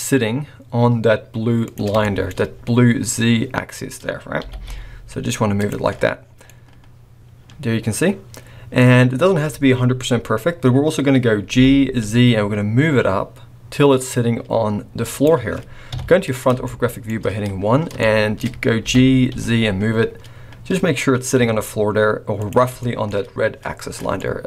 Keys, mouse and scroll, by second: 2.0 shift+middle click, 2.3 scroll up 5, 4.4 g, 5.8-6.4 scroll down 10, 6.4 middle click, 11.5 g, 15.9 KP_1, 16.6 shift+middle click, 17.1-17.9 shift+scroll up 7, 18.0 shift+middle click, 18.8 g, 22.8 shift+middle click, 22.8-23.3 shift+scroll up 3, 23.8-24.2 scroll down 6, 24.2 middle click.